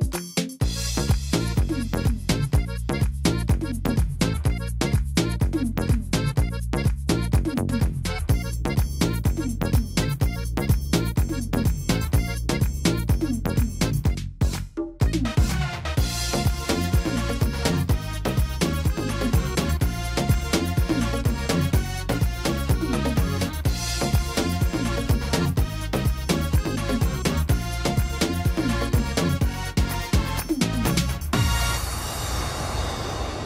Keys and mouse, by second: 1.6 middle click, 3.3-7.2 middle drag, 8.6-10.9 drag, 9.5 s, 12.5 click, 13.2 y, 16.7-18.3 middle drag, 18.3-19.4 drag, 19.4 middle click, 19.6-26.3 drag, 29.3-30.8 drag, 30.8 s.